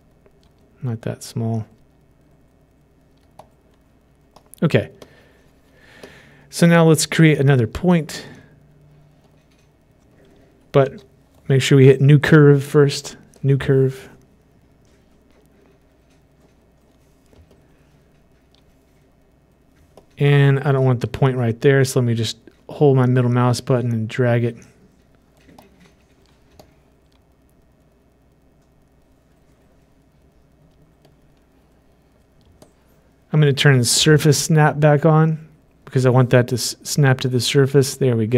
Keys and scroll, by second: 11.4 ctrl+z.